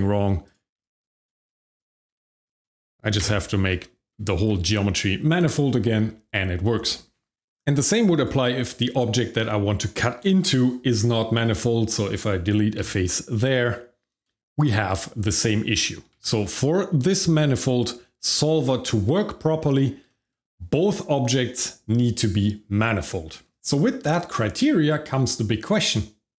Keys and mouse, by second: 0.4 click, 0.8 shift+click, 1.2 shift+click, 1.7 click, 2.1 shift+middle click, 2.4 click, 3.2 f, 3.8 shift+middle click, 4.3 Tab, 8.1 click, 8.6-9.3 shift+middle drag, 10.1 Tab, 11.4 click, 12.8 x, 14.2 shift+middle click, 15.0 middle click, 15.5 shift+middle click, 16.1 ctrl+z, 18.2 Tab, 19.1 shift+middle click, 19.6 middle drag, 20.0 shift+middle click.